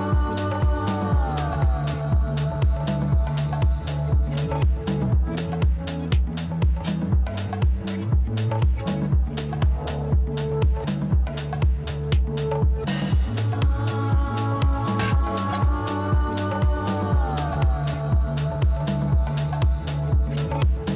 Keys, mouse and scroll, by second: 1.4-2.5 drag, 2.5-3.7 right drag, 3.7-5.1 middle drag, 5.1 scroll up 2, 5.8 Tab, 6.4-7.4 middle drag, 7.4-8.0 scroll up 1, 8.0-9.9 shift+middle drag, 9.9 click, 11.4 alt+shift+click, 14.6 alt+shift+click, 16.3 alt+shift+click, 18.6 alt+shift+click, 19.5-20.9 shift+middle drag.